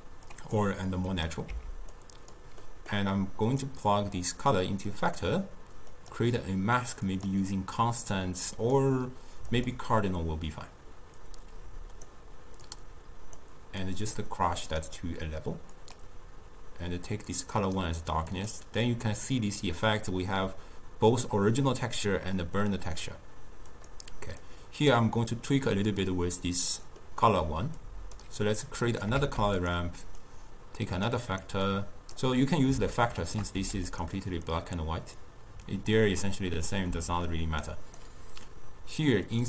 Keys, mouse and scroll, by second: 1.2 click, 1.6 x, 2.0 click, 2.7-3.7 middle drag, 3.7 drag, 6.0-16.0 drag, 18.4 click, 23.8 click, 24.5 click, 27.1 middle click, 28.0 click, 28.7 click, 29.2 shift+d, 30.3 click, 31.4 click, 31.8-33.1 drag, 33.1 shift+right click, 33.7 g, 34.6 click, 37.0-37.7 middle drag, 37.7 click, 39.3-39.4 drag.